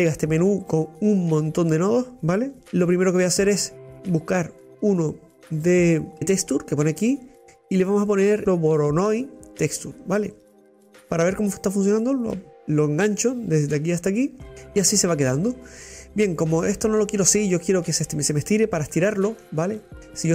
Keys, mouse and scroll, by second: 2.5-2.9 drag, 9.2 Delete, 11.5 click, 18.4 scroll down 5, 18.9-20.3 middle drag.